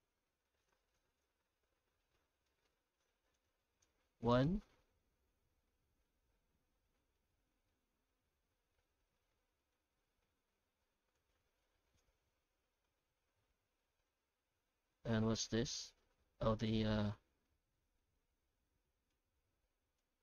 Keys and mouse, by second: 2.5 middle click, 3.3-4.4 drag, 7.2-9.7 middle drag, 11.1 click, 12.3 middle click, 13.8 middle click, 14.6 middle click, 17.2 middle click, 18.0 middle click, 19.2 click.